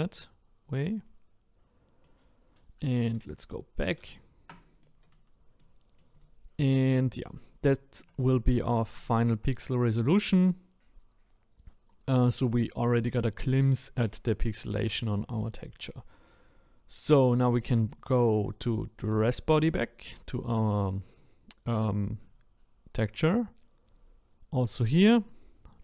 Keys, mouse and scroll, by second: 3.4 ctrl+z, 4.0 ctrl+z, 4.8-6.1 middle drag, 6.1 click, 6.8-9.5 middle drag, 9.5-9.9 scroll up 2, 9.9-11.6 middle drag, 11.6-12.1 scroll down 1, 12.2-19.2 shift+middle drag, 19.2 click.